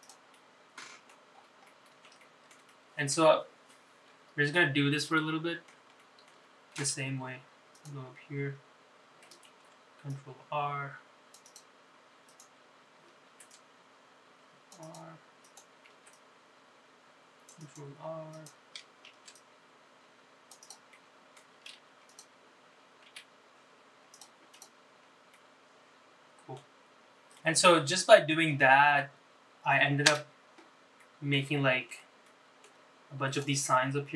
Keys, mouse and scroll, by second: 1.1 click, 1.5 middle click, 2.5-2.9 scroll up 3, 2.9 middle click, 3.3 shift+middle click, 3.8 middle click, 5.3-5.9 scroll down 3, 5.7-6.9 middle drag, 7.1 shift+middle click, 8.9 2, 9.1 click, 9.4 scroll up 2, 10.6 ctrl+r, 13.4 click, 14.3 ctrl+r, 16.6 click, 17.1 ctrl+r, 19.5 click, 20.2 ctrl+r, 22.1 middle click, 23.1 3, 23.3 click, 24.2 e, 25.7 click, 26.1 scroll down 1, 26.5-29.3 middle drag, 29.5-29.9 scroll down 1, 30.5 KP_Divide, 31.2 middle click, 31.7 shift+middle click, 32.5 shift+middle click, 33.6 click.